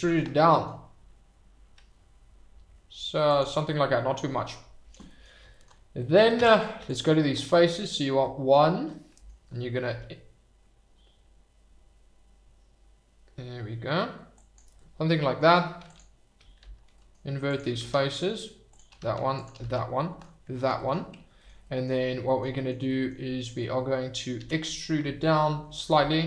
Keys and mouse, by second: 0.0 e, 0.5 middle click, 3.3 click, 3.8 middle click, 5.2 click, 6.1 click, 6.4 Tab, 8.2 middle drag, 8.9-9.2 middle drag, 10.0 i, 14.3 click, 15.3 middle click, 15.8 click, 16.7 shift+r, 16.9 middle click, 17.4 click, 17.9 shift+r, 18.0 middle click, 19.4 click, 19.7 shift+r, 19.9 middle click, 20.7 middle click, 21.6 middle click, 22.5 middle click, 22.7 middle click, 24.7 e, 25.7 Escape.